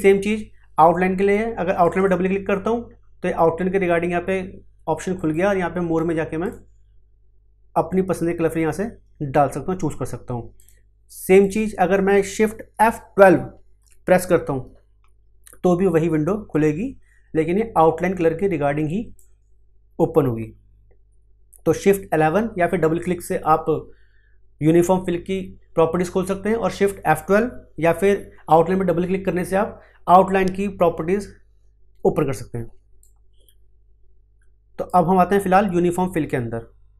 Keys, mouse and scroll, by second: 1.8 click, 5.1 click, 10.5 click, 13.9 shift+F12, 18.8 click, 33.0-36.9 drag.